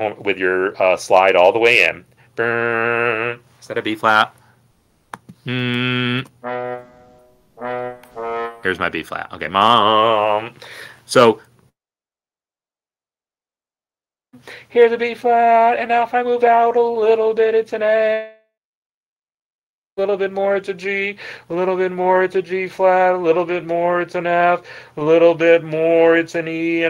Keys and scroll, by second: 6.1 n, 7.4-8.1 typing, 8.2 Down.